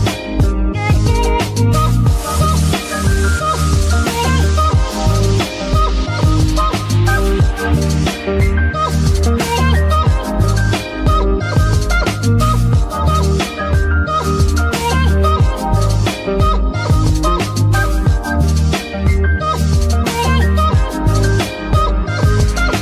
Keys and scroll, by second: 2.5 Escape, 3.3 g, 5.8 Escape, 6.1 a, 6.4 g, 6.4 r, 8.2 g, 8.8 Escape, 10.1 g, 10.8 Escape, 14.1 r, 14.3 x, 16.0 Escape, 16.9 r, 17.1 x, 18.0 Escape, 18.4 r, 18.6 y, 19.9 Escape, 21.5 z.